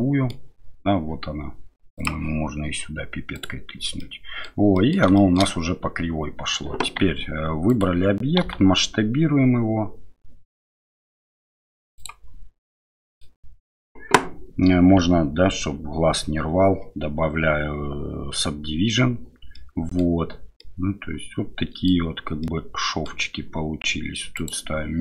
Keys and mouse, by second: 4.0-4.4 middle drag, 4.7 middle drag, 5.1 shift+middle drag, 7.7 click, 12.6-13.2 middle drag, 15.4 ctrl+3, 19.6-20.0 middle drag, 20.6-21.9 middle drag, 22.4-23.1 middle drag.